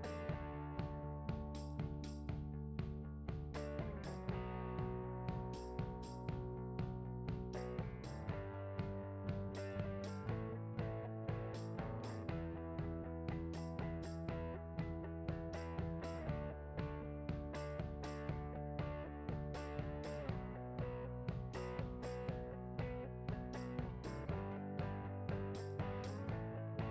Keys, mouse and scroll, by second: 0.0 click, 0.1 scroll up 1, 0.3 Tab, 0.3 `, 1.4 Tab, 2.0-2.5 drag, 2.5 scroll down 1, 2.6 `, 3.1 Tab, 3.6 click, 3.9 a, 4.3 ctrl+e, 4.5 click, 4.7 ctrl+e, 4.9 click, 5.0 alt+a, 5.3 alt+click, 5.9 alt+shift+click, 6.3 ctrl+b, 7.3 click, 7.7 `, 8.3 ctrl+b, 9.0 shift+click, 9.3-9.8 scroll up 2, 9.8 `, 10.7 scroll down 1, 10.9 click, 11.2 `, 11.6 alt+a, 11.8 `, 12.1 scroll up 1, 12.2 click, 12.5 Tab, 12.5 alt+click, 12.8 ctrl+b, 13.0 click, 13.1 `, 13.3 scroll up 1, 13.6 Tab, 14.1 click, 14.3 scroll down 1, 14.5 `, 14.8 click, 15.4 ctrl+j, 15.5 alt+a, 15.6 click, 16.3 s, 16.5 click, 16.6 KP_1, 17.4-18.6 right drag, 17.5-17.9 scroll down 2, 17.9 r, 19.9 ctrl+a, 20.1-23.4 typing, 20.5 click, 21.0 click, 21.5 click, 22.9 Tab, 23.1 alt+click, 23.5 Tab, 24.0 right drag, 24.3 click, 24.4 scroll down 1, 24.5-26.9 typing, 24.9 click, 25.0-25.9 scroll down 3, 26.5 click.